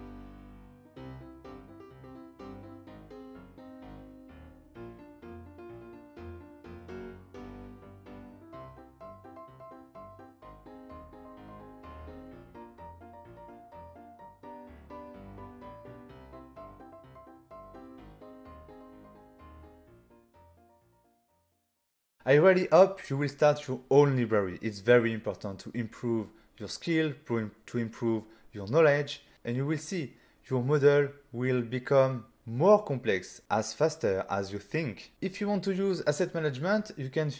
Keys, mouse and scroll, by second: 0.1 click, 0.9 click, 2.1-2.6 scroll down 4, 2.6 s, 3.2 click, 3.5-3.9 scroll up 4, 3.9 s, 5.0 click, 5.2 g, 5.7 z, 6.9 click, 7.2 middle click, 7.2 typing, 7.9-8.3 scroll down 3, 8.5 shift+middle click, 8.9 click, 9.7 click, 11.2 click, 11.3 click, 12.1 click, 12.5 click, 14.0 n, 14.5 click, 15.0 5, 15.8 middle click, 16.5 5, 17.0 click, 17.3 middle click, 18.4 middle click, 19.1 ctrl+middle click, 19.8 middle click, 22.1 click.